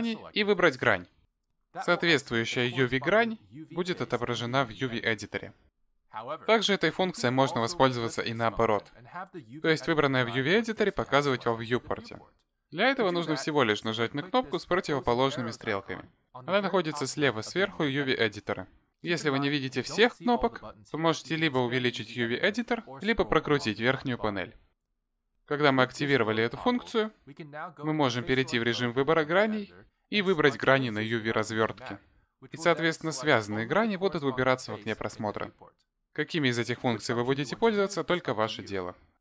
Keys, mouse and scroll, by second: 0.6 click, 1.5 click, 20.6-21.5 scroll down 4, 21.5-23.2 scroll up 4, 23.2-24.0 scroll down 6, 23.9-26.1 scroll up 6, 26.1 click, 30.9 click, 32.4 click, 33.6 click, 34.9 click.